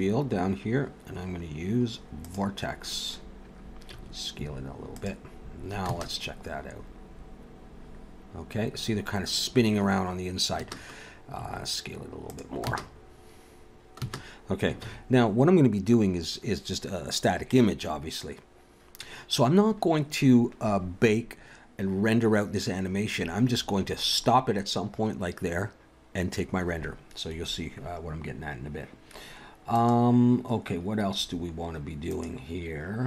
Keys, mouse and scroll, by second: 3.9 s, 5.9 space, 10.6 space, 11.4 s, 12.7 space, 14.0 space, 14.9 ctrl+s, 29.7 click, 32.0 click.